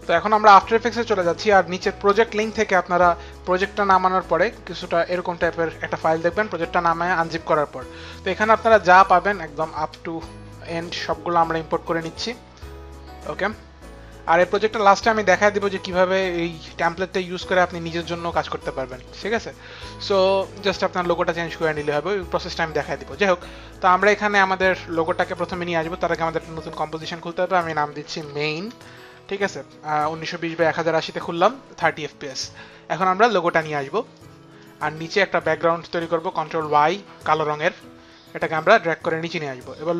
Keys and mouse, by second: 1.7 click, 3.4 click, 3.6 click, 4.3 click, 5.4 click, 8.0 click, 8.8 click, 11.3 click, 18.8 click, 21.5 click, 24.9 click, 27.8-28.9 typing, 32.6 Return, 33.4 click, 34.1 click, 36.3 ctrl+y, 38.6 click.